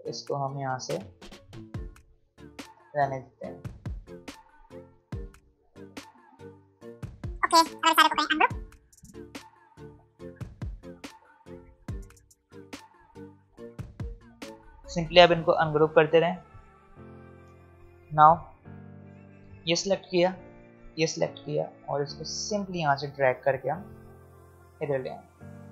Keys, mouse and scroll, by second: 0.1-1.4 drag, 2.2 alt+scroll down 2, 3.6 ctrl+z, 5.8-6.6 alt+scroll up 3, 7.0 v, 7.5 alt+scroll down 1, 7.7 alt+scroll up 1, 7.8 alt+scroll down 1, 8.1 right click, 9.1 click, 9.9 right click, 10.6 click, 10.6 click, 11.1-11.7 alt+scroll up 3, 11.7 click, 12.8 right click, 13.4 click, 16.2 right click, 17.2 click, 18.2 alt+scroll up 1, 18.6 alt+scroll down 1, 19.3 click, 20.7 shift+click, 22.1 alt+scroll down 1, 23.0-25.7 drag.